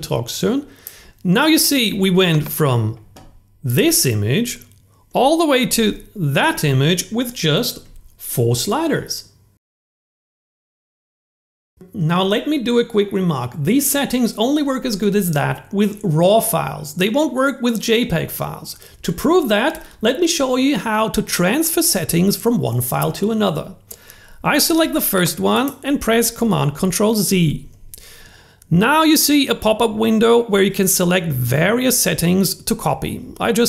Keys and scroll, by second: 5.2 super+z, 27.5 super+c.